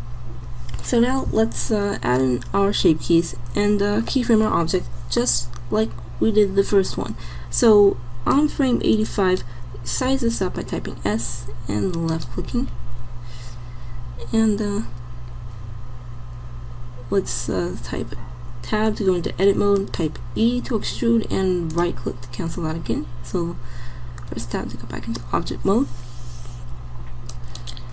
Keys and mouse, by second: 10.1 s, 18.0 Tab, 20.5 e, 24.4 Tab.